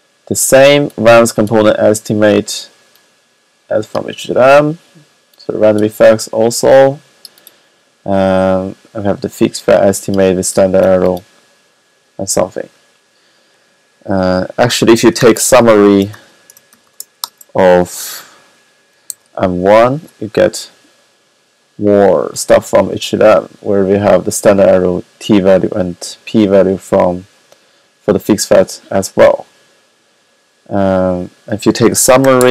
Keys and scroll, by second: 15.1-17.0 typing, 18.6-19.2 typing, 31.6-32.5 typing.